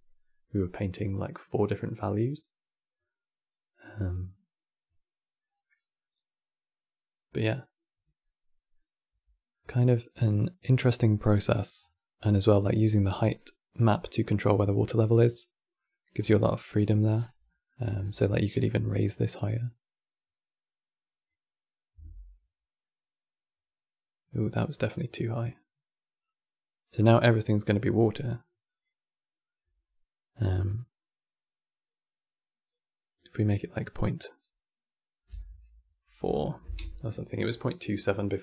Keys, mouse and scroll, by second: 0.1-4.7 middle drag, 5.5 scroll down 1, 5.7-8.7 middle drag, 9.2-11.5 middle drag, 11.5-11.8 scroll up 6, 13.1-13.4 scroll down 3, 13.7-15.9 middle drag, 15.9 scroll down 4, 16.1 middle click, 16.8-17.2 scroll down 10, 17.2-17.7 middle drag, 17.7-18.3 scroll up 12, 18.3-22.5 drag, 28.4-32.6 drag.